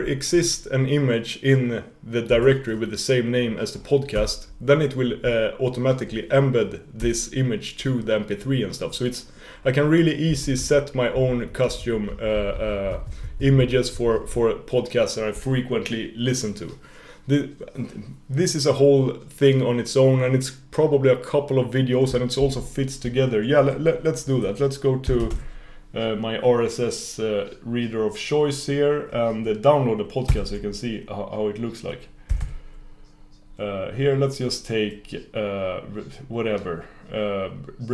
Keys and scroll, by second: 22.5 super+f.